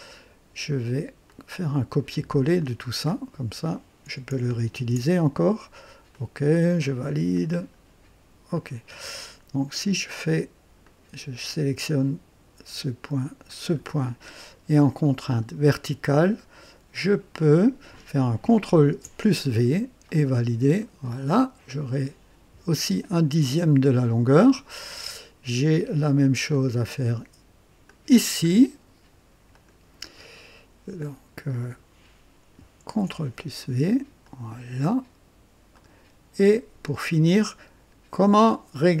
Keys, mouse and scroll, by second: 1.2 click, 2.6 click, 3.1 click, 4.8 ctrl+c, 6.1 click, 7.4 click, 8.5 click, 10.8 click, 13.4 click, 15.2 click, 17.4 click, 18.9 ctrl+v, 20.1 click, 20.8 click, 22.7-23.9 drag, 26.5 click, 27.8 click, 29.5 click, 31.6 click, 32.9 ctrl+v, 34.2 click, 35.7 click.